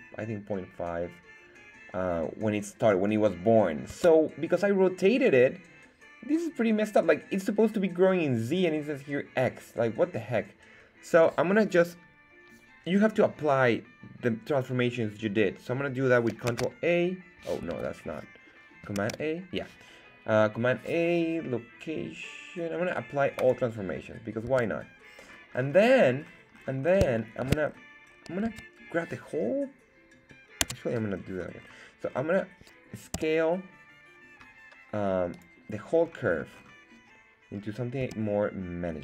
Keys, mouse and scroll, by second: 3.9 Tab, 16.5 alt+a, 17.6 Escape, 18.9 super+a, 24.5 Tab, 25.3 scroll up 2, 25.7 scroll down 1, 25.8-27.1 scroll down 8, 27.1 shift+middle click, 27.7-28.4 scroll down 2, 28.4 Tab, 31.6-33.1 scroll up 3, 33.1 s, 35.3 click, 35.7 scroll down 2, 36.0 scroll up 2, 36.3-37.5 scroll down 4, 37.5 scroll up 2, 38.0 s.